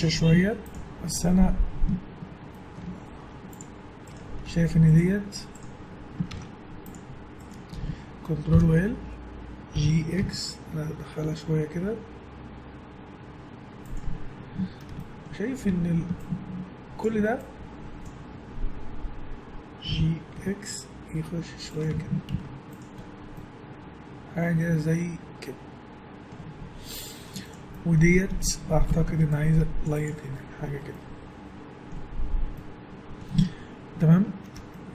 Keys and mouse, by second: 2.3 middle click, 3.2 Tab, 3.3-4.6 drag, 4.6-7.2 right drag, 6.3 ctrl+Tab, 8.5 ctrl+l, 9.7 g, 15.7 a, 16.6-18.0 drag, 19.9 g, 21.9 Tab, 22.3 z, 26.8 middle click, 27.2 Tab, 27.3 middle click, 28.9 ctrl+r, 30.1 Tab, 33.6 Tab.